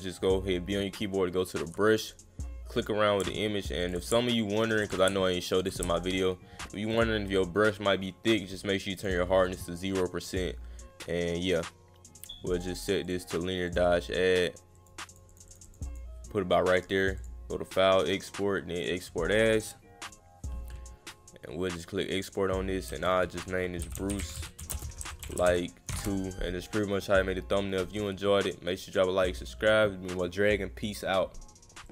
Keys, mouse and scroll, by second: 1.5 alt+click, 2.0 click, 2.8 click, 3.8 alt+click, 4.0 click, 4.7 alt+click, 4.9 click, 5.6 alt+click, 5.7 click, 6.9 click, 9.0 click, 10.3 click, 12.2 click, 13.0 click, 13.7 click, 14.4 click, 14.7 click, 15.1 click, 15.3 click, 15.5 click, 15.6 click, 15.9 click, 16.7 click, 17.2 click, 18.8 click, 22.1 click, 23.9-25.9 typing, 31.8 click.